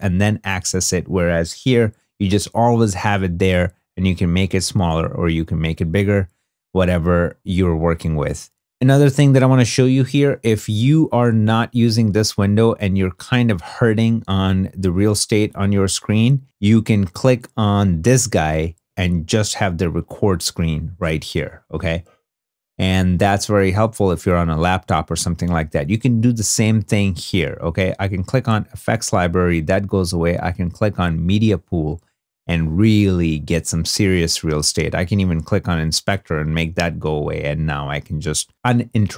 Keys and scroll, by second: 0.7 super+Tab, 39.0 i.